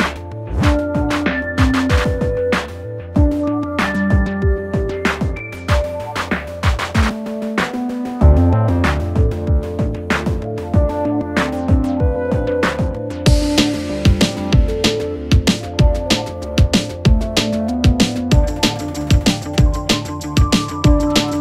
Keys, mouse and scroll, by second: 0.1 Caps_Lock, 2.5 Caps_Lock, 3.4-5.4 drag, 8.2 click, 9.8-12.8 drag, 19.4 click.